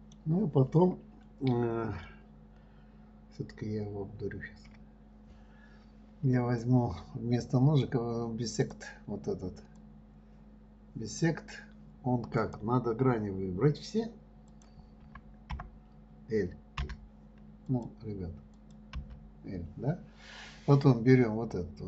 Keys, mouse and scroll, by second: 5.1 KP_1, 7.0-10.0 drag, 10.1 click, 12.7 click, 14.9 click, 15.4 ', 18.1 click, 18.9 click, 19.3 l.